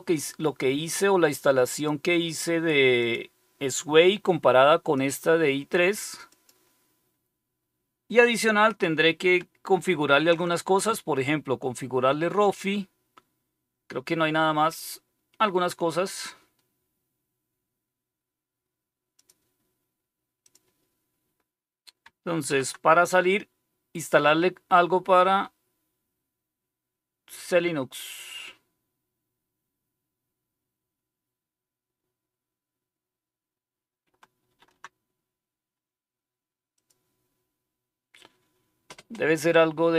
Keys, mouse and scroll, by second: 1.7 click, 2.9 click, 4.9 click, 6.3 click, 19.1 click, 20.4 click, 22.4 shift+super+e, 34.4 shift+super+q, 36.7 click.